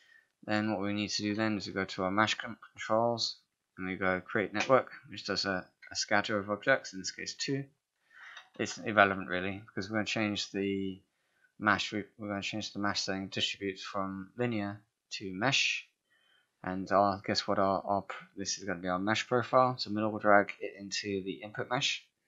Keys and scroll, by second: 1.5 space, 8.4 ctrl+a.